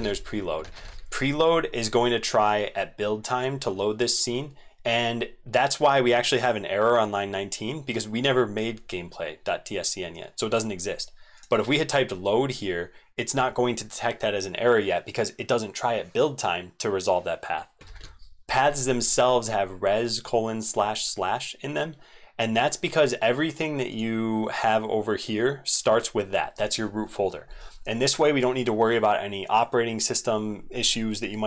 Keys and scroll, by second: 0.6 ctrl+z, 0.8 ctrl+z, 17.9 ctrl+z.